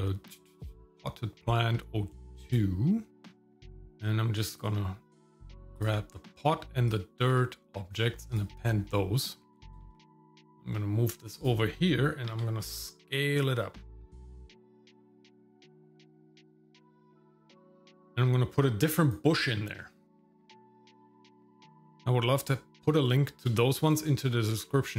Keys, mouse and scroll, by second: 9.5 g, 12.3 s, 14.1 g, 14.9 g, 15.9 s, 16.5 g, 18.6 click, 19.5 shift+middle click, 19.9 middle click, 20.1 scroll up 2, 20.2 shift+middle click, 20.6 click, 20.8 click, 21.1 scroll down 1, 21.2 scroll up 1, 21.2 scroll down 1, 21.6 click.